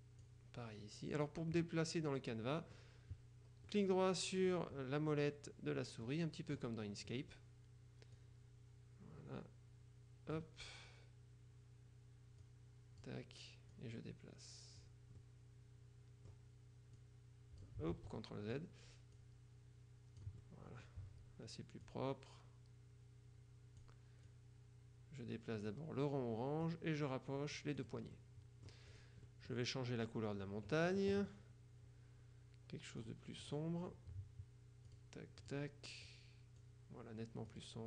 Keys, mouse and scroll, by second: 1.7-3.3 middle drag, 3.7-4.9 middle drag, 4.9 click, 6.1-7.9 drag, 8.2-10.9 drag, 12.5-13.6 drag, 13.8-15.3 drag, 15.3 right click, 17.1 click, 18.1 ctrl+z, 18.7 ctrl+middle click, 19.3-20.5 drag, 20.5 middle click, 21.9 click, 26.7-28.3 drag, 28.3 middle click, 29.0 click, 29.4 middle click, 33.1 click, 35.0 click, 36.1 click, 37.6-37.8 drag.